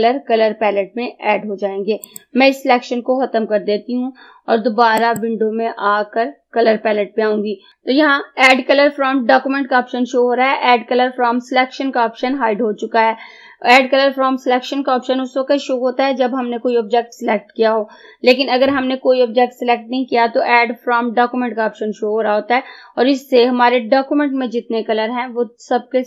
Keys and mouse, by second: 2.2 click, 5.1 click.